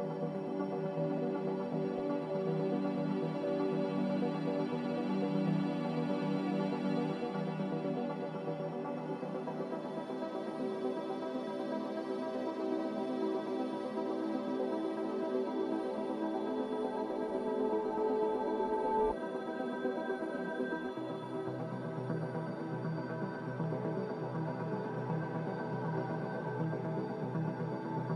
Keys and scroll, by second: 15.9 a, 21.6 z, 23.5 7.